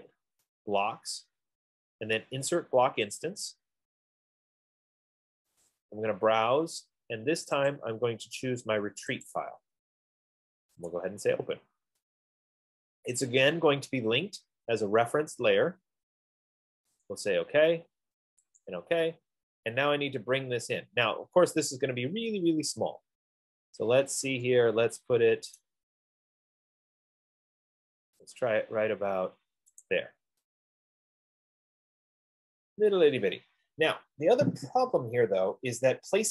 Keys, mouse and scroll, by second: 0.2 click, 3.5 click, 5.9 click, 8.0 click, 9.6 click, 11.3 click, 17.4 click, 18.9 click, 22.4-23.8 scroll, 23.9 scroll up 8, 25.9 right click, 26.1-26.6 scroll down 5, 26.8-27.3 scroll, 27.8-28.2 scroll, 30.2 click, 32.0-32.7 scroll, 34.0-35.1 scroll, 35.4 scroll.